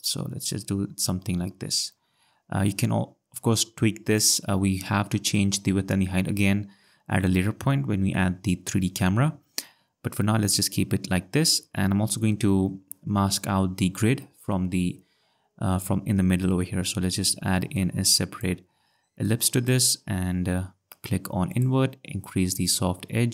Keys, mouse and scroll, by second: 17.7 click, 19.2 click, 21.5 click, 22.6 click.